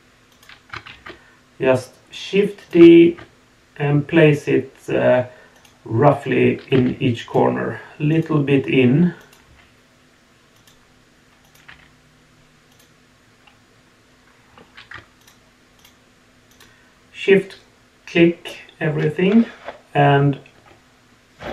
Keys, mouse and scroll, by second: 0.9 shift+d, 8.1 click, 9.2 click, 9.4 g, 11.4 click, 11.6 g, 15.2 shift+click, 15.8 shift+click, 16.5 shift+click.